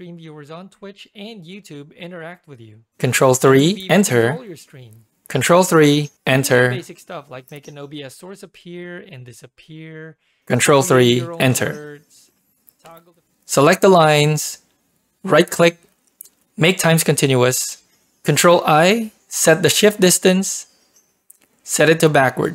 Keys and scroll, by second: 3.1 ctrl+3, 3.5 Return, 5.4 ctrl+3, 6.1 Return, 10.5 ctrl+3, 11.1 Return, 13.3 ctrl+shift+p.